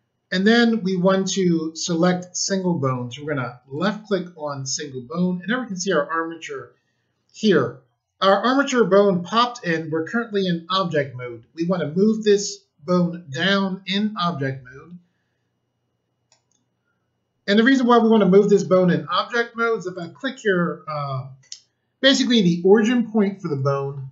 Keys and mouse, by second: 3.7 click, 12.8 click, 19.9 click, 23.4 click.